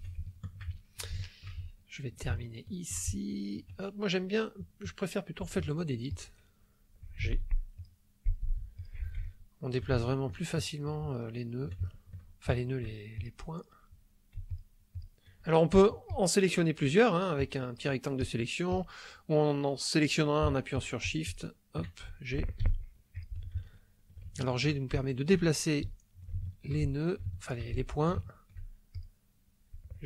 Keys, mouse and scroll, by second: 0.2 ctrl+shift+click, 0.8 ctrl+shift+click, 1.7 ctrl+shift+click, 1.7-2.8 ctrl+shift+middle drag, 3.1 ctrl+shift+click, 4.8 click, 5.4 click, 6.2 click, 7.2 g, 7.8 click, 8.2 click, 8.4 g, 8.8 click, 9.3 ctrl+middle click, 10.0 ctrl+shift+click, 10.6 ctrl+shift+click, 11.2-12.3 ctrl+shift+drag, 12.5 ctrl+shift+click, 13.3 shift+click, 14.6 shift+click, 14.9 shift+click, 16.1 click, 17.4 click, 18.3 click, 18.8 click, 20.8 shift+click, 22.6 g, 23.1 click, 23.6 ctrl+middle click, 24.3 ctrl+shift+middle click, 25.0 ctrl+shift+middle click, 25.9 ctrl+middle click, 26.9 ctrl+shift+middle click, 27.8 ctrl+shift+middle click, 28.9 shift+click.